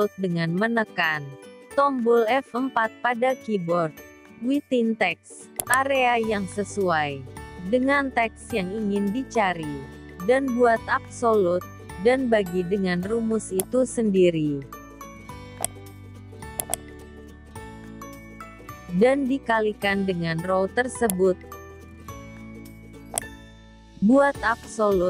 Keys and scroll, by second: 9.7 F4, 15.7 ctrl+c, 17.1 ctrl+v, 23.8 F4.